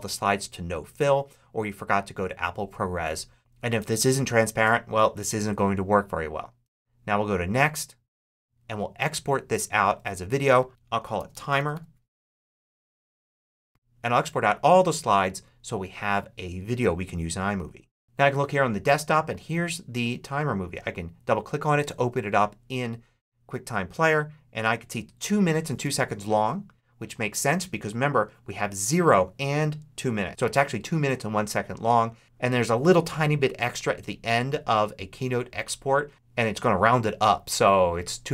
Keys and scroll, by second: 10.7-12.0 typing, 12.2 Return.